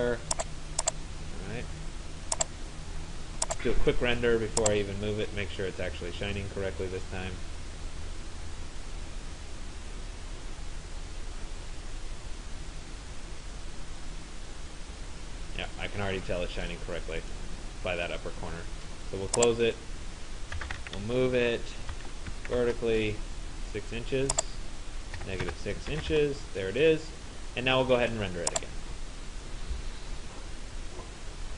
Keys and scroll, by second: 21.6 Return, 25.2 -, 25.5 6, 26.2 Return.